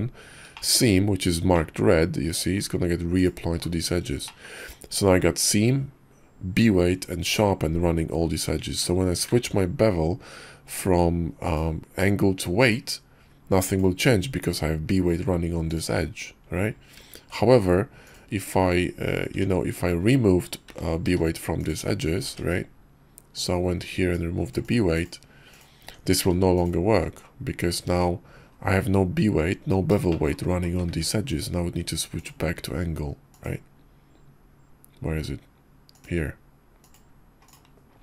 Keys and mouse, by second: 0.5 shift+click, 1.5 click, 2.0 middle click, 4.1 shift+middle click, 8.7 Tab, 9.4 ctrl+`, 16.9 ctrl+`, 19.3 ctrl+`, 19.3 Tab, 20.6 a, 21.1 q, 22.2 ctrl+`, 25.8 Tab, 26.2 q, 30.1 shift+middle drag, 30.9 ctrl+`.